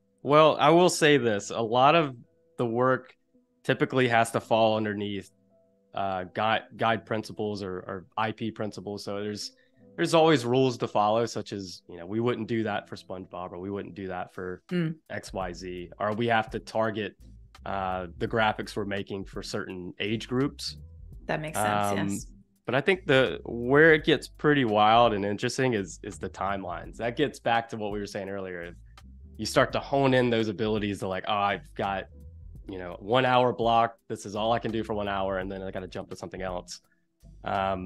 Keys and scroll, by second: 1.2 super+-, 2.5 space, 19.3 super+=, 20.9 space, 22.4 z, 23.0 space, 23.9 v, 37.7 space.